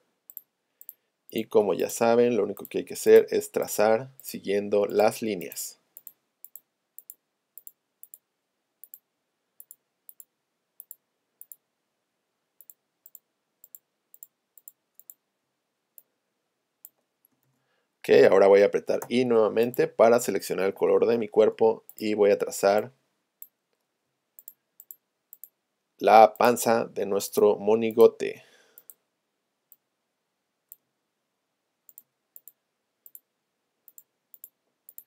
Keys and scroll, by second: 19.1 i, 21.1 p.